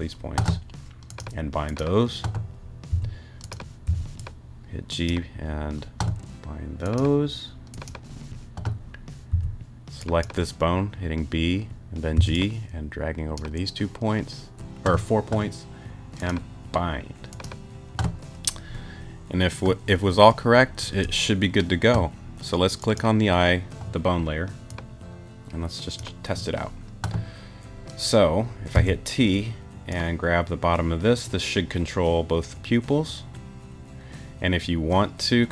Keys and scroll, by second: 2.9 b, 3.9 g, 9.3 b, 12.2 g, 28.7 t.